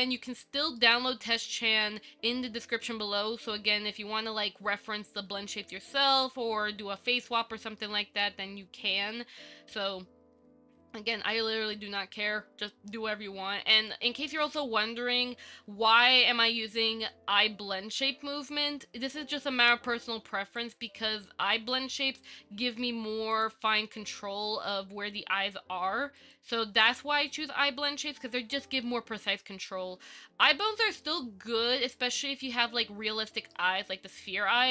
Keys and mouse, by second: 1.0-1.8 shift+middle drag, 14.1 middle click, 20.8 click, 21.8 click, 22.5-23.0 middle drag, 26.4 click, 27.7-29.9 middle drag, 32.6-33.8 shift+middle drag.